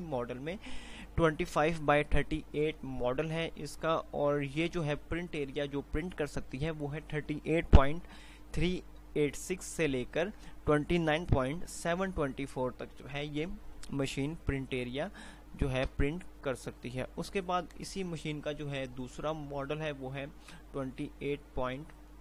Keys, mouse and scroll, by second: 16.3 Page_Down, 18.6 typing.